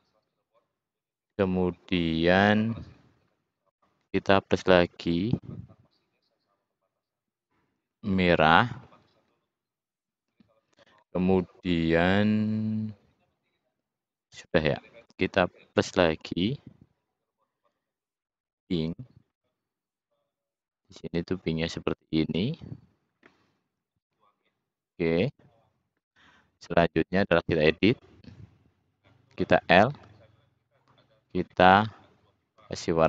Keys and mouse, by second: 3.9 click, 8.9-15.6 drag, 19.5-21.1 drag, 23.9-24.5 middle drag, 30.0 l, 32.7-33.0 middle drag.